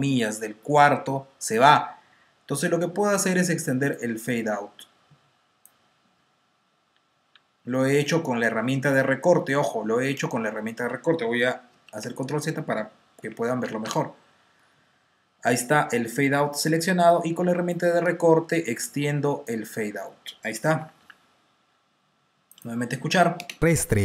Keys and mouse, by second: 1.3 click, 5.2 click, 5.9 t, 6.8 r, 7.2 r, 11.6 super+z, 13.1 t, 14.3 t, 15.6 typing, 17.6 click, 20.7-21.5 typing, 23.6 click, 23.6 space.